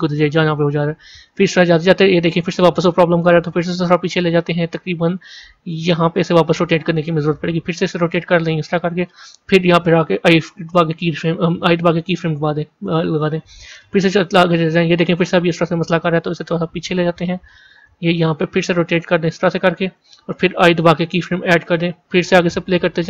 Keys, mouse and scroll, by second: 0.5-7.7 drag, 7.7 r, 13.6-18.5 drag, 18.5 r.